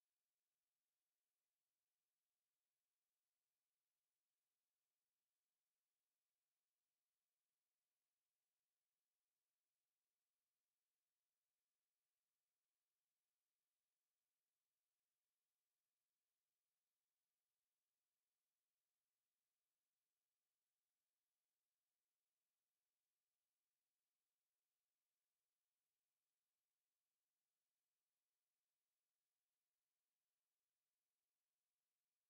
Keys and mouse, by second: 23.6-25.5 drag, 24.9 a, 25.5-25.9 middle drag, 26.0 middle click, 26.9 middle drag, 28.0 KP_5.